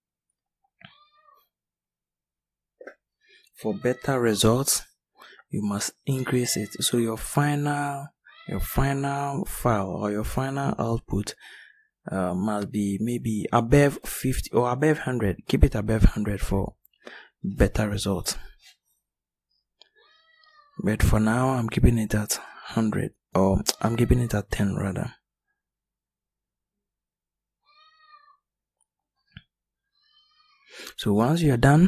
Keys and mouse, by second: 24.0-25.3 middle drag.